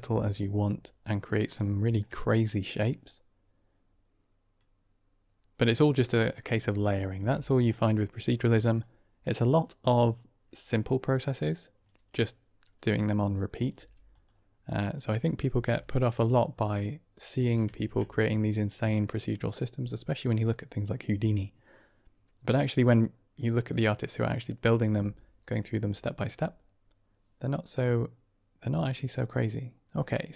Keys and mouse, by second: 1.5 middle drag, 1.7 click, 3.0-5.5 middle drag, 6.1 middle click, 6.8 drag, 7.1 g, 7.9 middle click, 8.7-9.2 drag, 13.6 g, 15.4 g, 17.7 shift+a.